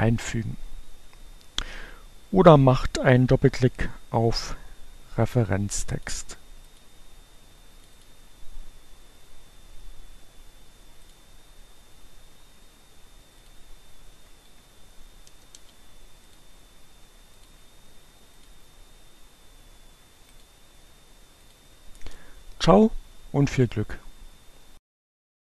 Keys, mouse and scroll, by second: 5.8 click, 6.1 click, 7.8 click, 11.0 click, 13.3 click, 13.6 BackSpace, 13.8 space, 16.0 click, 17.3-17.9 drag, 18.3 click, 20.0 click, 20.7 scroll up 2, 20.9 click.